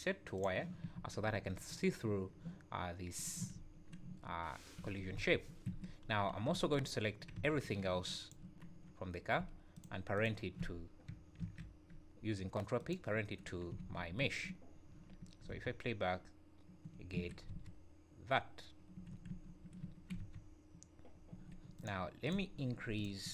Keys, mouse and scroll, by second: 1.2 `, 2.0 `, 3.2 click, 3.6 `, 4.5-4.8 scroll down 2, 4.8 Escape, 5.2 space, 5.7 Escape, 6.0 scroll up 2, 6.5 `, 6.9 scroll down 1, 7.4 b, 9.2 scroll up 1, 9.7 shift+click, 10.1 shift+click, 11.4 ctrl+p, 13.9 ctrl+s, 14.2 `, 15.1 scroll down 2, 15.5 space, 17.2 Escape, 17.5 space, 19.0 Escape, 19.3 `, 19.8 `, 20.2 space, 21.3 Escape, 21.8 click, 22.2 click, 23.2 click.